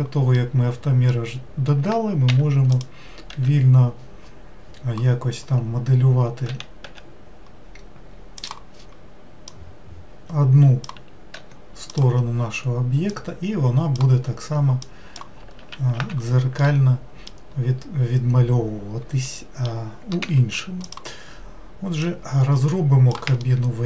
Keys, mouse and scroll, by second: 0.3-2.3 middle drag, 2.3 3, 2.7 click, 3.3 w, 6.4 w, 6.8 w, 8.4-9.5 drag, 11.3 1, 11.9 click, 13.1 click, 14.8 click, 15.5 ctrl+z, 15.9 ctrl+z, 16.6-20.2 middle drag, 20.2 3, 20.8 click, 22.0 click, 23.4-23.8 shift+middle drag.